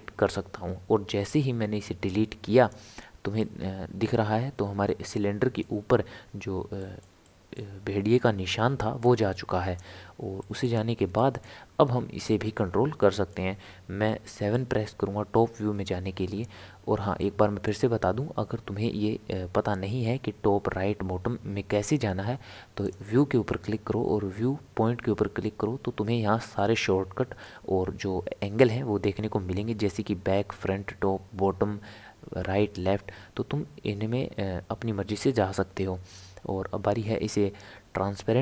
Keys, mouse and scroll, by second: 2.1 click, 3.4-6.5 middle drag, 6.8-9.0 shift+middle drag, 9.0-10.4 drag, 10.4-14.4 middle drag, 14.4 KP_7, 16.0 scroll up 1, 16.1 scroll down 1, 16.2 scroll up 1, 17.2-20.3 shift+middle drag, 22.8-26.0 drag.